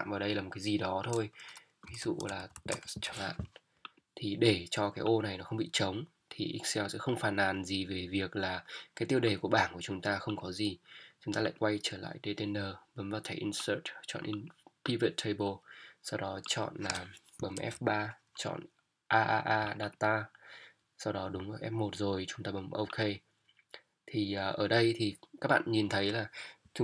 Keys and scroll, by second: 2.0 shift+t, 2.4 shift+e, 2.5 s, 3.0 Return, 17.6 F3.